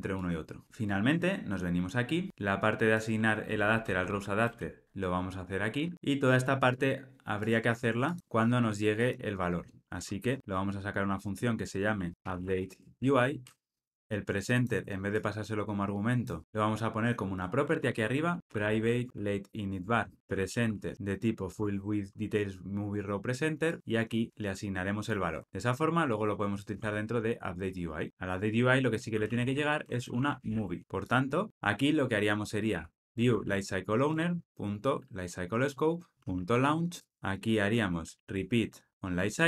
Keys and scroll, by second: 4.1 super+x, 5.9 super+x, 12.1 alt+super+m, 16.4 super+z, 19.8 Tab, 21.5 Tab, 30.7 Escape, 31.5 Escape, 34.0 Return, 37.0 Return, 38.9 Escape.